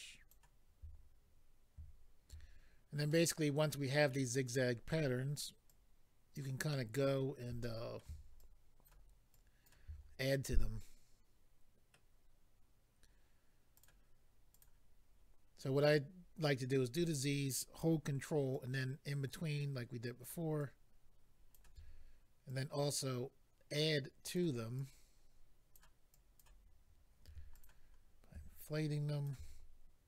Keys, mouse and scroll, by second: 3.1 middle click, 4.5-4.9 scroll up 1, 5.7 ctrl+click, 6.7 ctrl+middle click, 7.6 middle click, 8.4 ctrl+click, 9.3 ctrl+click, 9.9-10.4 scroll down 1, 10.4 middle click, 13.7 click, 13.9 click, 14.5 click, 14.9 scroll up 2, 15.6 scroll up 2, 18.5 ctrl+click, 20.6 ctrl+click, 22.5 click, 24.7 click, 26.1 click, 27.2 f, 27.5 click, 27.6 click, 27.8-28.5 scroll down 2, 28.6 ctrl+click.